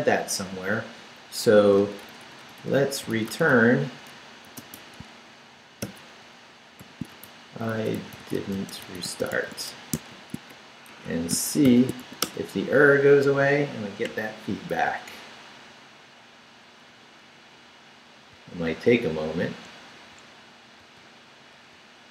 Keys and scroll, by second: 1.6-5.8 typing, 7.1-10.6 typing, 10.9 shift+Escape, 11.6 shift+;, 12.0 shift+w, 12.2 Return, 14.7 super+r, 18.3 super+r, 20.8 super+r.